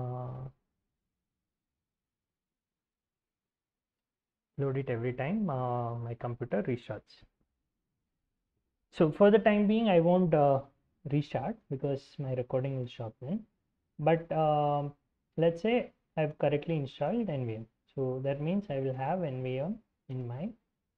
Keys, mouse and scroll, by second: 2.7 ctrl+c, 2.7 ctrl+click, 3.0 alt+Tab, 3.5 ctrl+shift+v, 4.2 Escape, 5.9-7.4 typing, 7.9 Return, 10.9-15.4 typing, 16.3 Return, 16.5-17.4 typing, 17.6 ctrl+l, 18.4-20.9 typing.